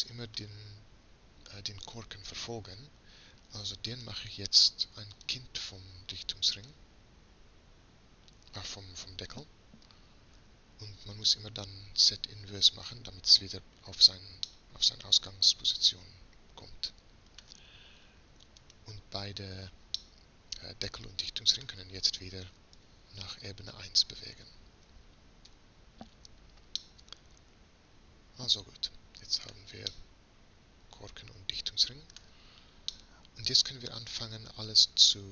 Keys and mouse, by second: 2.8-3.9 middle drag, 3.9-5.8 drag, 5.8-6.6 middle drag, 6.6-9.6 drag, 12.8-14.5 drag, 14.5-16.4 middle drag, 18.9-22.8 right drag, 22.8 m, 25.5 1, 26.2-27.0 drag.